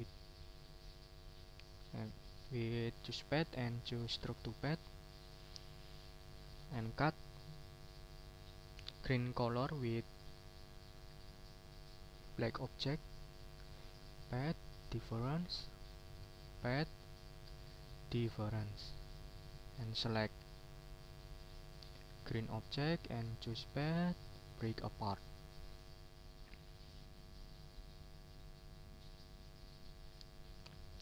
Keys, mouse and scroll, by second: 4.5 click, 5.2 middle click, 5.9 click, 6.7 click, 9.6 click, 11.3 click, 12.8 shift+click, 14.0 click, 15.0 click, 15.9 click, 16.3 shift+click, 17.1 click, 18.1 click, 19.0 shift+click, 19.7 shift+click, 20.1 shift+click, 21.7 shift+click, 23.4 click, 24.6 click, 25.1 click.